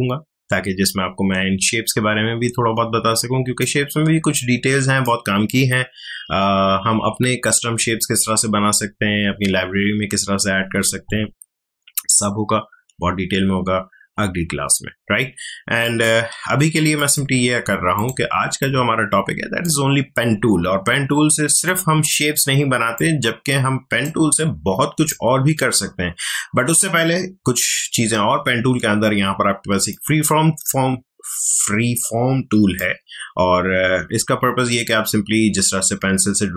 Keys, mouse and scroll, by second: 4.3-15.5 drag, 15.8 shift+click, 17.9-32.4 shift+drag, 32.7-36.5 drag.